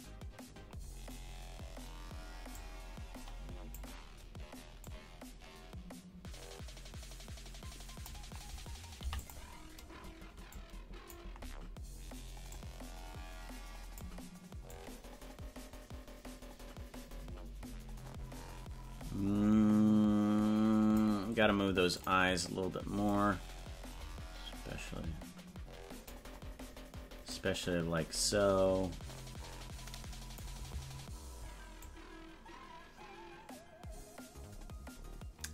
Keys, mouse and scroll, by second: 2.5-3.8 drag, 4.9-8.3 drag, 8.9 i, 10.6-11.2 drag, 12.4-14.1 drag, 14.8-21.1 drag, 21.9 click, 23.2-26.3 drag, 27.2-30.5 drag, 31.9-35.5 drag.